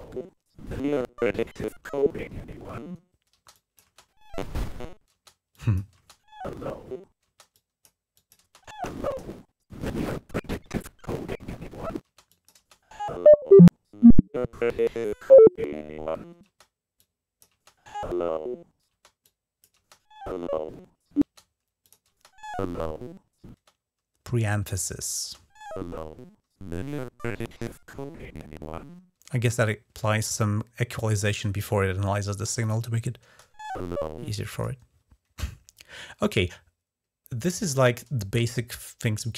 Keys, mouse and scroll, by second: 3.1 space, 3.3 click, 3.6 space, 4.9-5.7 typing, 5.3 click, 5.7 click, 7.3-8.6 drag, 11.8-12.4 typing, 12.1-13.6 drag, 16.2 space, 16.7-17.4 drag, 17.3 space, 18.7 space, 19.0-19.5 drag, 19.5 space, 21.0 space, 21.6 click, 24.6 click, 29.1 space, 32.4 click, 33.0 space, 34.1 space, 34.3 click.